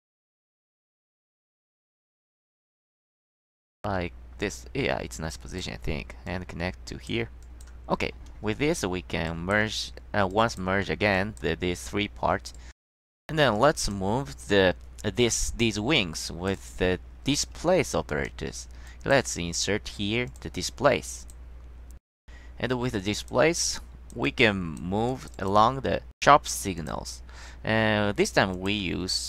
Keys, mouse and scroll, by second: 1.7-4.5 middle drag, 4.8-5.3 scroll down 1, 5.4 click, 6.4-7.2 drag, 7.5 click, 9.4 click, 10.4 drag, 11.3 click, 13.7-14.1 drag, 16.4 click, 16.7 click, 18.2 click, 19.0 click, 20.4 click, 21.4 click, 23.1 click, 23.9 click, 24.4 click, 25.2 click, 25.5 click, 26.9 click, 28.7 click.